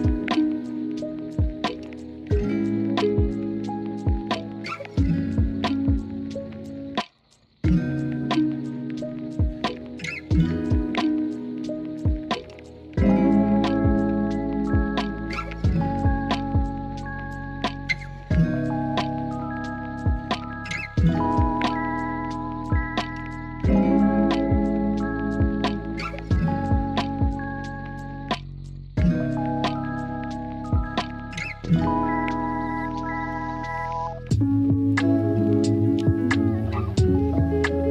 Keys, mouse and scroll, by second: 0.5 click, 1.4 Tab, 1.8 shift+middle click, 3.2 click, 4.7 click, 4.9 click, 5.4 click, 6.2 click, 7.2 click, 8.5 shift+middle click, 8.8 click, 9.3-10.8 drag, 11.2 click, 13.7 click, 14.4 click, 15.9 KP_3, 16.9 click, 17.5 click, 20.0 KP_1, 22.2 Tab, 22.9-23.4 drag, 25.5 Tab, 25.9 Tab, 26.6-27.6 drag, 29.0 shift+middle click, 29.7 click, 33.2 click, 33.7 alt+z, 34.3 click, 35.1 click, 37.3 click.